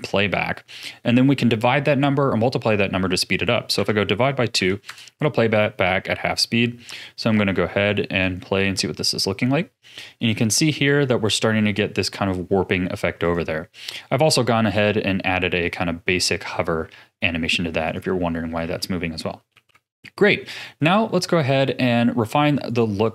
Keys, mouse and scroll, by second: 7.3 ctrl+s, 8.2-11.2 drag, 13.2-14.8 drag, 17.8-18.6 drag, 18.6 a, 19.5 ctrl+s, 20.0 middle click, 21.0-22.6 scroll down 8, 22.6 click, 23.0 click.